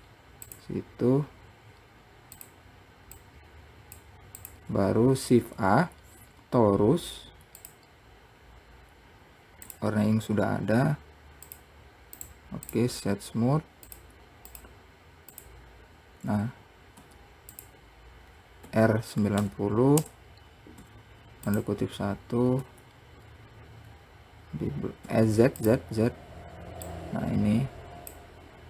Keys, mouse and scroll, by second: 0.7 click, 1.5-2.1 scroll down 2, 2.7 click, 3.4 click, 4.6 click, 5.6 shift+a, 9.9 click, 11.9 click, 12.4-14.1 right drag, 14.1 click, 14.8 click, 15.6 click, 18.9 r, 22.9 Tab, 24.2-25.4 scroll down 1, 25.4 z, 27.1 click.